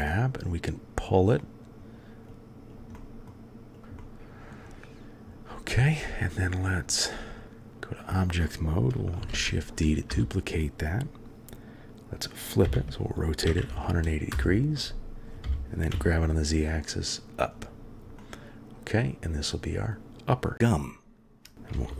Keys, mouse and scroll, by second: 0.4 click, 1.4-1.8 drag, 2.2 click, 3.0 middle click, 3.7 click, 3.8 middle click, 4.0 click, 4.1 middle click, 6.6-7.4 drag, 9.3 shift+d, 12.6 r, 15.4 g, 18.2-19.9 middle drag, 21.7 g.